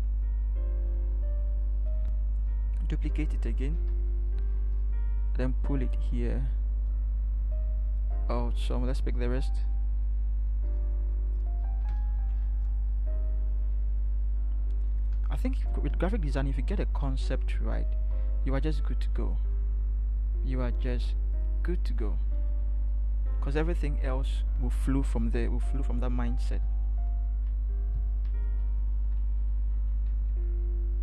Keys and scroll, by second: 11.8 ctrl+c, 24.2 ctrl+shift+t, 26.6 ctrl+t, 29.0 shift+Left, 29.2 shift+Left, 29.4 shift+Left, 29.6 shift+Left, 29.8 shift+Left, 30.0 shift+Left, 30.1 shift+Left, 30.3 shift+Left, 30.5 shift+Left.